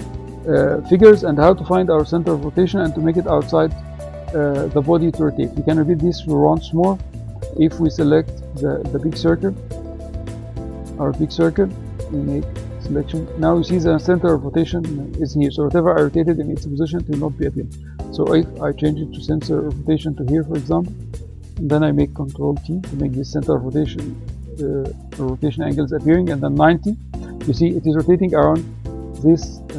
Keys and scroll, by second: 21.8 ctrl+t, 26.0 9.